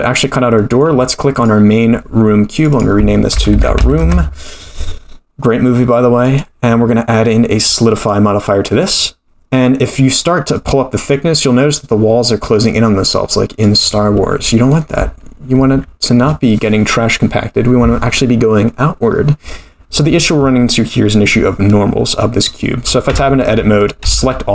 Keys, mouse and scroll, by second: 0.2-0.6 scroll down 2, 0.6 middle click, 1.3 click, 2.5 click, 2.7-4.5 drag, 3.6 o, 6.2-8.2 drag, 10.5-13.6 drag, 15.7 ctrl+z, 23.1 Tab, 24.0 a.